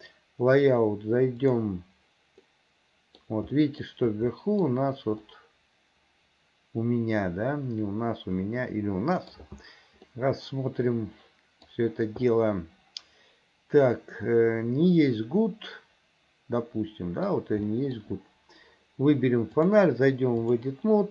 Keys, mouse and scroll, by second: 1.6 click, 2.5 middle click, 3.6 middle click, 4.4 middle click, 5.3-9.4 middle drag, 10.1-11.7 middle drag, 12.4-17.3 middle drag, 17.8 middle click, 19.6-20.7 drag.